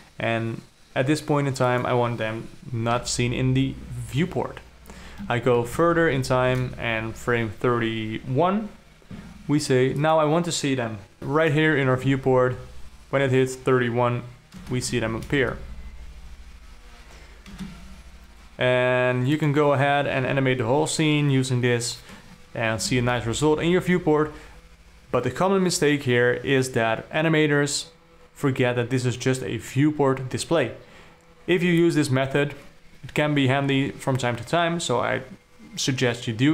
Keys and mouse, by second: 2.1 click, 3.4 i, 6.0 shift+Up, 6.2 shift+Up, 6.4 shift+Up, 10.5 click, 11.2 shift+Left, 11.2 ctrl+middle click, 11.2 d, 11.7 middle click, 12.4 space, 15.0 space, 15.6 shift+Left, 15.9 space, 18.1 space, 23.4 shift+Left.